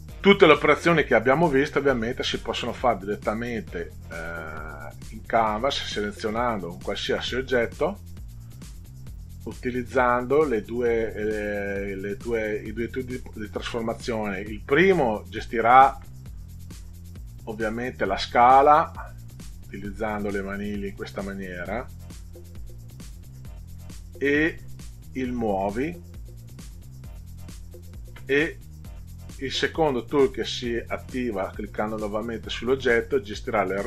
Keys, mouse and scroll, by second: 3.3 click, 6.1 middle click, 6.8 ctrl+scroll up 2, 7.8 click, 9.2 click, 10.0 click, 19.7-21.7 drag, 25.4-27.7 drag, 31.3 click, 33.7-33.8 drag.